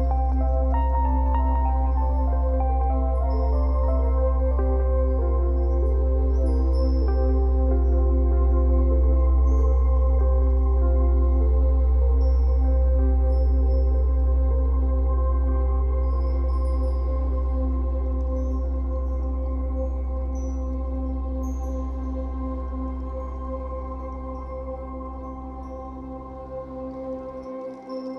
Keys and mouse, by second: 0.1-2.1 drag, 2.1 g, 3.9-8.3 drag, 11.2-12.2 drag, 14.3 click, 15.3 click, 16.5 click, 17.3 click, 19.2 click, 21.3 click, 23.2 click, 24.5 click.